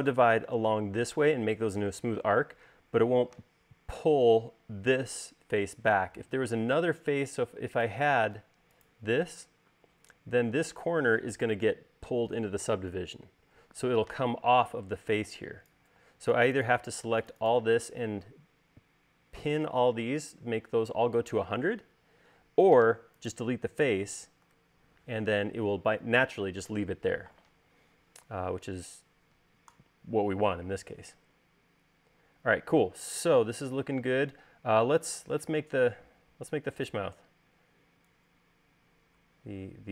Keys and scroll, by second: 7.4 l, 9.3 space, 15.1 e, 24.6 BackSpace.